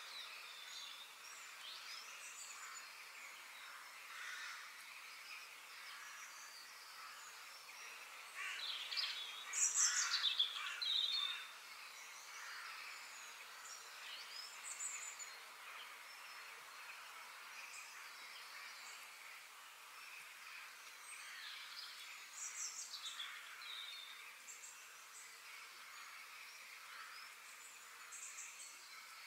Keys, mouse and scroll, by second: 0.4-2.3 middle drag, 4.1-6.2 middle drag, 7.2 click, 7.8 click, 8.3 shift+click, 12.5 g, 14.9 click, 15.9 f, 19.3-22.6 shift+middle drag, 25.0 shift+middle click, 25.8 click, 26.3 f.